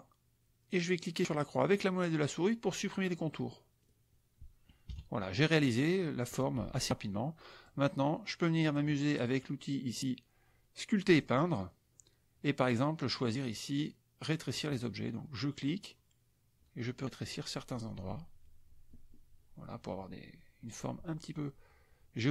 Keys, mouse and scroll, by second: 3.7 middle click, 4.8 KP_Subtract, 5.6 click, 7.6-8.9 drag, 11.0 click, 14.5 click, 15.6-22.3 drag.